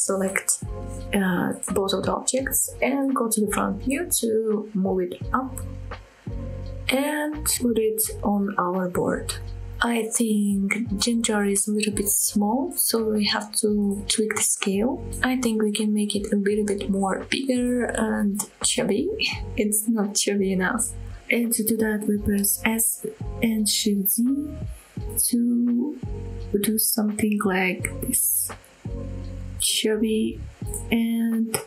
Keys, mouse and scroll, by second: 0.0 click, 0.5 shift+click, 1.0 scroll down 1, 1.2 middle drag, 1.6-2.1 scroll up 1, 2.1 KP_1, 2.7-3.1 scroll up 3, 3.3 shift+middle drag, 4.0 g, 4.3 z, 7.7 shift+click, 8.1-8.4 scroll down 1, 8.4-9.3 middle drag, 9.5 scroll down 1, 9.8-10.1 middle drag, 10.4-10.9 middle drag, 11.1-11.5 scroll up 2, 11.5 middle click, 17.1 s, 22.6 z, 23.7 shift+z, 29.8 click, 30.1-30.6 middle drag, 30.9 middle click, 31.3 s.